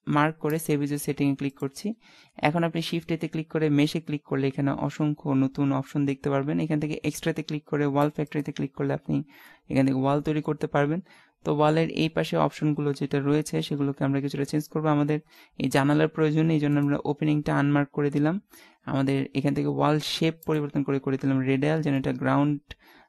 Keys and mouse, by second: 2.5 shift+a, 9.1-10.8 middle drag, 13.7-15.3 middle drag, 16.7-18.5 drag, 18.5 middle click, 21.4 middle click, 22.3 middle click, 22.7 middle click.